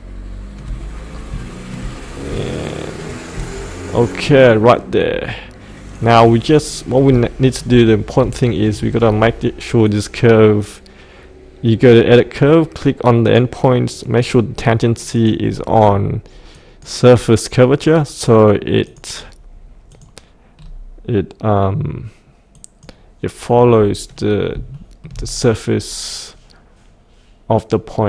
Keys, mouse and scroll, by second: 0.8-1.3 scroll up 1, 1.5 shift+middle click, 2.1 scroll down 1, 2.9 shift+click, 4.3 click, 6.4-7.0 scroll up 1, 7.2 shift+middle click, 8.0 scroll up 1, 8.4 shift+middle click, 9.8 click, 15.6-16.5 scroll down 1, 16.5 click, 20.5-22.5 scroll down 1, 22.5-23.7 drag, 23.7 scroll up 1, 24.7 shift+middle click, 25.3-28.0 scroll down 1.